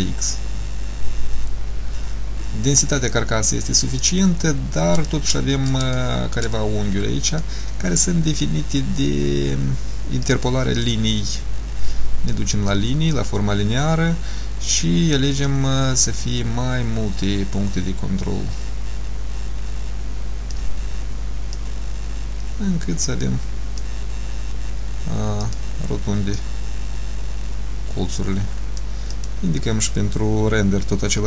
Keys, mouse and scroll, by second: 4.6 scroll up 1, 5.6 scroll up 1, 6.0 shift+middle click, 7.4 click, 10.4 click, 12.4 click, 15.6 click, 16.0 click, 21.6 click, 25.5 click, 26.4 click, 29.2 click.